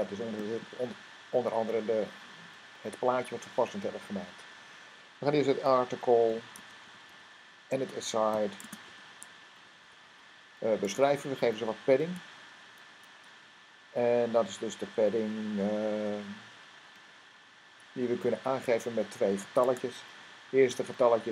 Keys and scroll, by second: 5.1 a, 6.3-10.3 typing, 11.8 typing, 14.1-14.9 typing, 17.4 typing, 20.5 0.